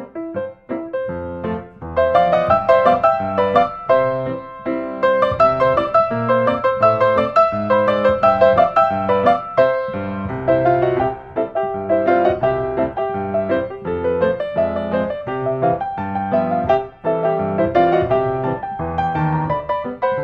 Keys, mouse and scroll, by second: 1.4 click, 2.7 click, 3.9 click, 4.3 Escape, 5.6 click, 6.5 click, 7.5 i, 10.9 click, 11.9 click, 13.5 click, 15.9 click, 16.9 click, 17.6-18.7 drag, 19.1 click, 19.6 click, 20.1-20.2 scroll.